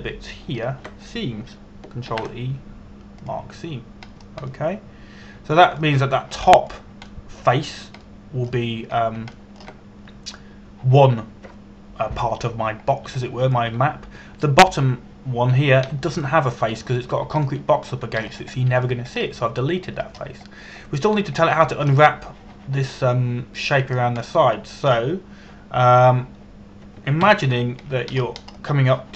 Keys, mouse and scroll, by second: 1.1 shift+right click, 2.2 shift+right click, 3.7 ctrl+e, 4.9 click, 5.7 scroll down 1, 6.1 middle click, 10.6 scroll down 1, 11.0 shift+middle click, 14.5 scroll down 1, 14.9 shift+middle click, 19.1 shift+middle click, 19.9 scroll up 1, 20.2 shift+middle click, 20.8-22.2 scroll up 1, 22.2-23.2 scroll down 1, 23.2 middle click, 28.9 KP_1.